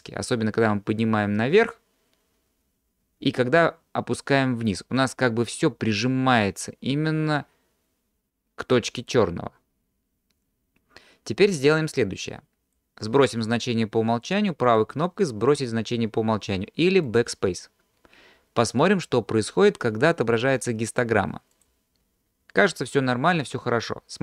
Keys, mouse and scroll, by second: 14.7-17.3 drag, 14.7 right click, 20.3-21.7 drag.